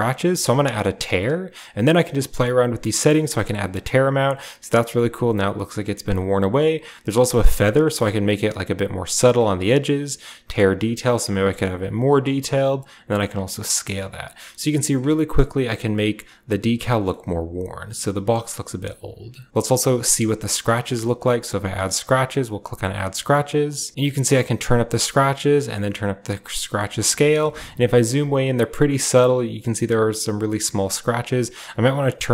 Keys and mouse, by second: 1.7-3.7 drag, 5.5 click, 6.2-8.7 drag, 9.8-11.2 drag, 12.4 click, 13.4 click, 15.3 click, 16.7 shift+drag, 19.5 click, 19.5 typing, 21.0 shift+middle drag, 21.8 drag, 23.3 click, 24.8-26.1 drag, 26.5 shift+middle click, 27.1 shift+click, 27.8 shift+click, 31.6 shift+click.